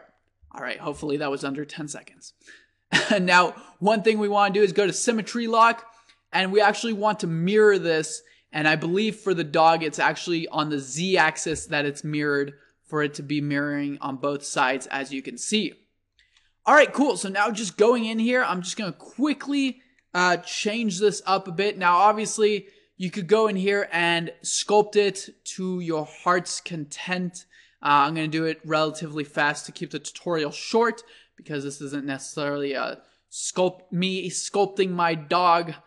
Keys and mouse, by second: 1.4-4.6 middle drag, 4.6 click, 10.8-12.5 drag, 12.7-14.5 drag, 16.4 ctrl+z, 17.3 click, 18.0-18.8 drag, 19.3 click, 19.4 middle click, 19.9-35.8 drag.